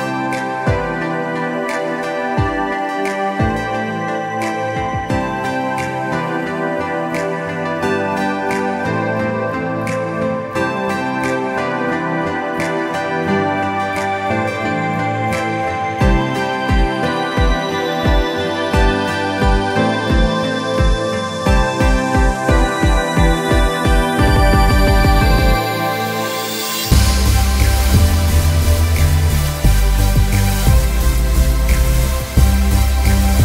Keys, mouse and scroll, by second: 3.3 shift+Num_Lock, 3.3 shift+click, 4.7-5.9 alt+scroll down 4, 4.9 click, 5.2 click, 5.5 click, 5.6 space, 5.9 click, 6.1 scroll up 1, 6.4 click, 6.9-7.5 scroll up 1, 7.5 click, 7.9 scroll down 1, 8.5 click, 9.2 click, 11.6-12.1 scroll up 1, 12.2 click, 12.4 alt+scroll up 1, 13.1 click, 16.6 click, 19.1 click, 19.8 click, 22.2 click, 22.6 alt+scroll down 1, 23.0 click, 24.0 click, 24.1 alt+scroll down 1, 24.4 space, 24.6 click, 24.8 alt+scroll up 2, 25.3 click, 25.4 scroll down 1, 26.0 click, 26.8 click, 27.5 scroll up 1, 27.6 click, 27.7 alt+scroll down 2, 28.0 click, 30.7 click, 31.7 ctrl+z, 32.1 scroll down 1, 32.3 click, 32.9 alt+scroll down 1, 33.2 ctrl+z.